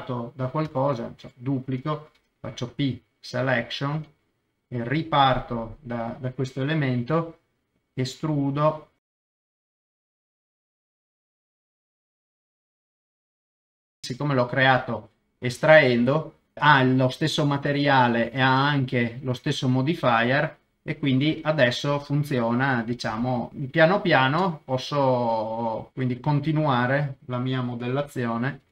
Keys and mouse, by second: 0.6 shift+d, 1.2 Escape, 2.1 p, 4.6 click, 5.2 Tab, 8.6-10.7 typing, 8.7 middle click, 9.1 click, 9.4 middle click, 9.5 click, 10.2 click, 10.3 middle click, 11.2 click, 11.4 click, 11.9 i, 12.1 click, 12.4 e, 13.0 click, 13.2 Tab, 13.2 middle click, 13.5 middle click, 13.7 middle click, 13.8 alt+z, 13.9 middle click, 14.0 KP_0, 20.5-21.7 middle drag, 22.2-23.7 middle drag, 23.5 KP_0, 24.3 KP_0, 25.5 middle click, 25.9 e, 26.7 click, 27.3 middle click, 28.6 2.